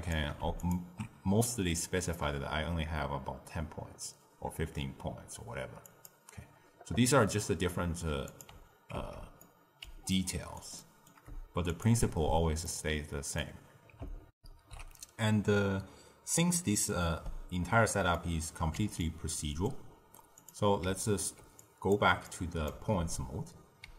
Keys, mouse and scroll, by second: 0.5 alt+shift+click, 5.7 click, 8.2 click, 8.9 ctrl+x, 9.3-11.7 middle drag, 11.7 alt+shift+click, 12.6-14.2 ctrl+middle drag, 14.2 ctrl+alt+shift+w, 14.7 ctrl+alt+shift+q, 18.1-20.3 middle drag, 20.3 click, 21.5 drag, 22.2 click, 22.9 ctrl+x.